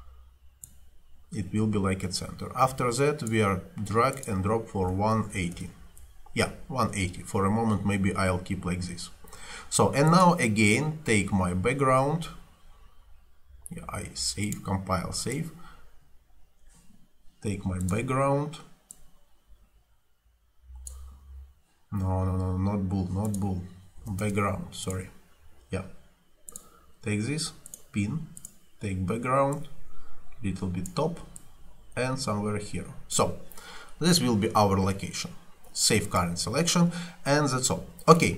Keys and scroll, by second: 4.6-5.9 typing, 24.1 0, 24.3 Return.